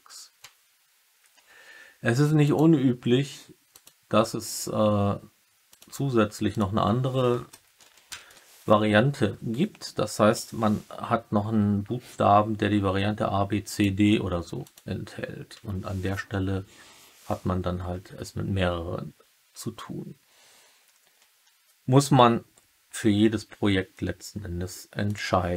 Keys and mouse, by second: 2.4-3.8 drag.